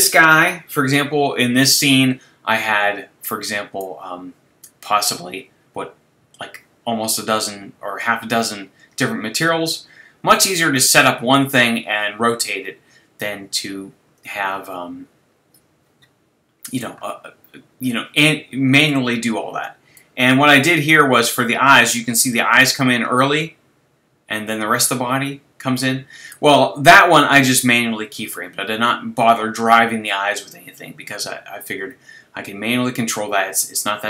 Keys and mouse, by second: 25.7-28.0 middle drag, 33.0-34.0 middle drag.